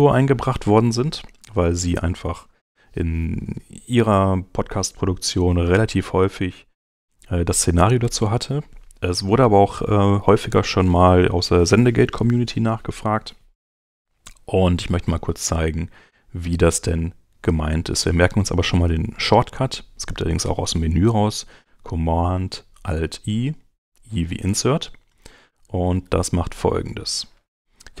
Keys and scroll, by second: 14.8 super+Tab, 24.5 super+Tab.